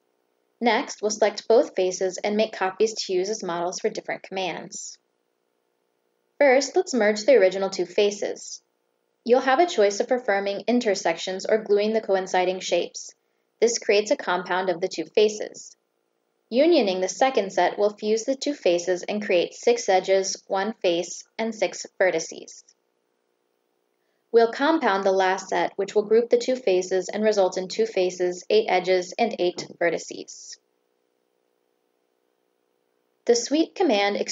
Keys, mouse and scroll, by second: 0.3 click, 2.1 click, 3.0 click, 4.4 click, 5.5 click, 7.9 click, 9.1 shift+click, 11.2 click, 13.6 click, 15.3 click, 16.8 shift+click, 17.8 click, 19.4 click, 20.4 click, 21.2 click, 21.6 click, 22.1 click, 22.6 click, 24.4 shift+click, 24.8 click, 26.6 click, 27.1 click, 27.6 click, 28.3 click, 28.9 click, 29.3 click, 30.1 click, 30.6 click, 31.1 click, 31.8 click.